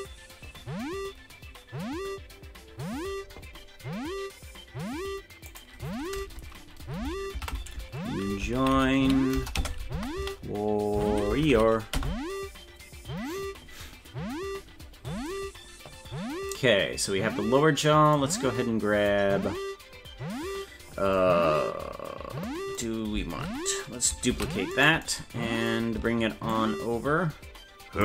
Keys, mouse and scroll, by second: 24.3 shift+d, 26.5-28.0 ctrl+drag.